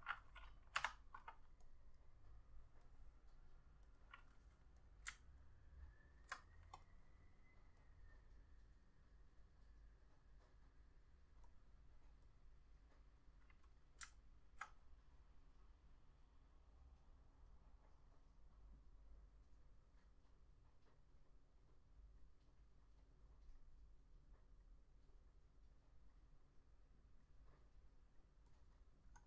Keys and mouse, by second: 0.9 F6, 4.1 double click, 5.6 alt+click, 14.3 alt+click, 28.8 double click.